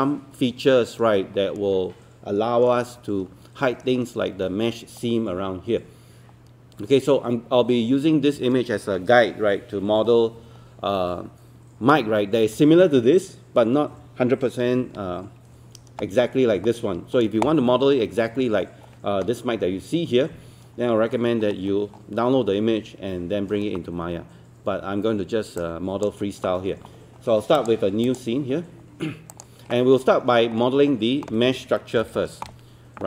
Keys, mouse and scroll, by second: 14.6-15.3 scroll down 1, 18.6-25.0 scroll up 1, 25.6-26.7 drag, 30.4-30.7 scroll up 1, 30.7-32.0 scroll down 1, 32.1 ctrl+space.